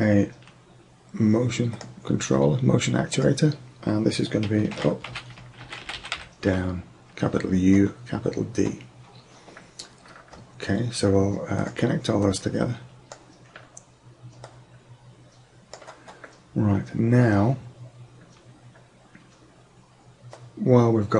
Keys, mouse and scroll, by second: 3.2-5.1 drag, 12.3-14.0 drag, 14.5-16.4 drag, 20.5-21.1 drag.